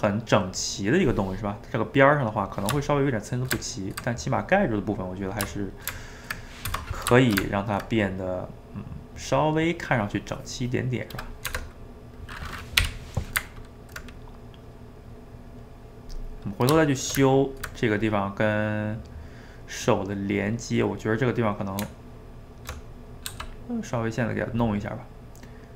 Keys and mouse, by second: 3.3 shift+right click, 3.6-5.9 ctrl+middle drag, 5.9 right click, 6.9 middle click, 7.2 shift+right click, 7.5-11.5 ctrl+middle drag, 11.5 Tab, 12.6 middle click, 12.8 /, 13.4-17.0 ctrl+middle drag, 17.0 shift+right click, 17.2 ctrl+middle click, 18.0 click, 18.4-21.3 middle drag, 21.4 middle click, 21.8 Tab, 23.0 middle click, 23.3 f, 23.7-25.5 middle drag, 25.5-25.7 drag.